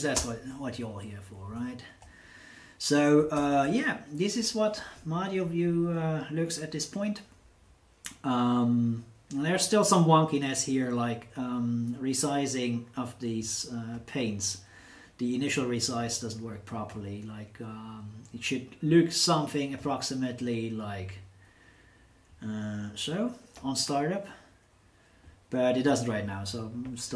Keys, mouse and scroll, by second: 0.1 Return, 3.3 super+Return, 13.3 click, 16.0-17.1 drag, 18.8-19.9 drag, 23.6 click, 25.8 click.